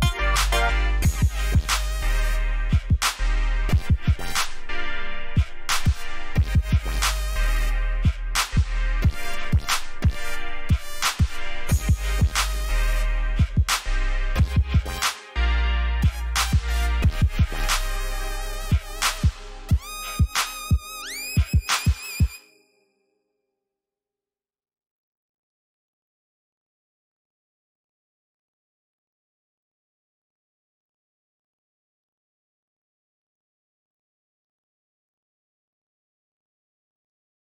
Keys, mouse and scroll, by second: 0.0-0.3 typing, 2.2 click, 3.4 alt+scroll down 1, 4.9-6.7 scroll down 1, 8.3 ctrl+alt+shift+e, 9.4 alt+scroll up 1, 11.7 click, 13.0-13.6 scroll up 1, 13.6 click, 16.6 alt+scroll up 1, 17.2 alt+scroll down 1, 17.9 scroll down 1, 18.8 scroll up 1, 19.6 scroll down 1, 21.2 scroll down 1, 22.2-22.9 scroll down 1, 23.4 ctrl+j, 25.9 click, 30.4 click.